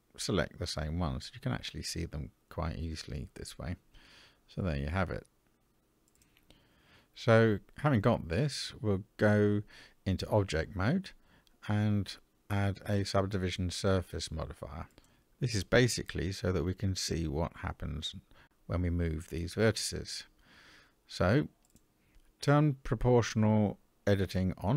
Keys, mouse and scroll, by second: 0.2 shift+click, 1.3 shift+click, 3.0 shift+click, 5.2 shift+click, 8.0-9.7 middle drag, 10.8-13.9 drag, 15.6 click, 16.9 click, 21.7 click.